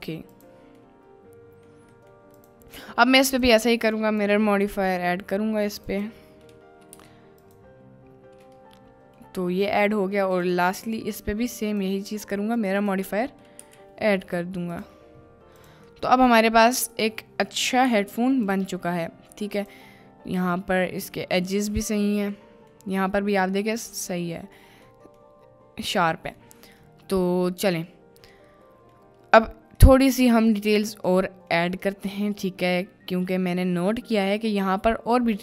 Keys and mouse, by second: 0.4 click, 0.9-1.7 middle drag, 2.1 middle click, 2.3 click, 3.3-5.0 drag, 5.7-7.7 drag, 8.6-9.2 middle drag, 9.8 middle click, 10.3 click, 10.7 click, 12.7-14.9 drag, 16.0 middle click, 17.8 KP_Decimal, 19.1 middle click, 19.5 click, 21.7 middle click, 22.4-22.8 middle drag, 23.7 middle click, 25.0 middle click, 26.6 middle click, 27.6-28.0 middle drag, 28.4-28.9 middle drag, 29.7 middle click, 30.3 middle click, 31.0 middle click, 32.0 middle click, 34.2 middle click.